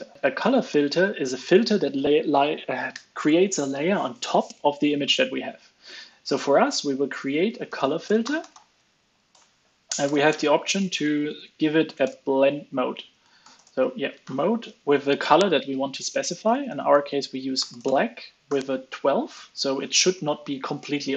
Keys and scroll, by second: 10.0 alt+BackSpace, 10.2 alt+BackSpace, 10.7 alt+BackSpace, 11.2 alt+shift+Right, 11.4 alt+shift+Right, 11.5 alt+shift+Right.